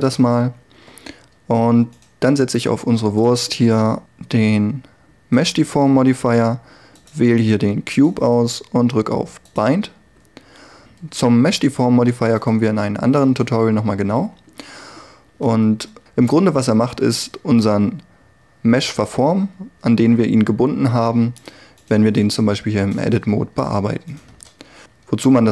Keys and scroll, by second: 0.3 Tab, 15.5 Tab, 16.7 g, 22.5 g, 24.4 Tab.